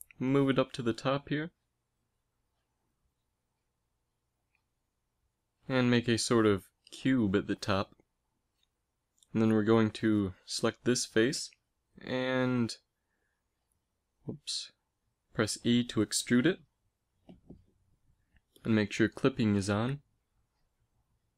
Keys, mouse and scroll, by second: 2.9 KP_3, 3.5 z, 5.7 g, 9.9 z, 10.9 z, 11.1 a, 11.4 b, 12.3 z, 14.1 s, 16.6 e, 18.2 a.